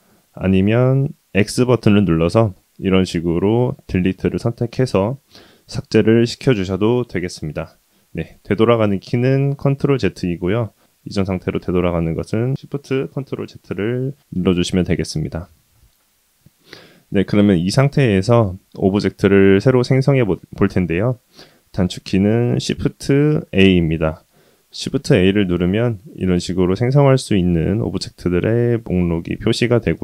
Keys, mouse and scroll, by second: 1.3 x, 8.3 ctrl+z, 12.3 ctrl+shift+z, 22.8 shift+a.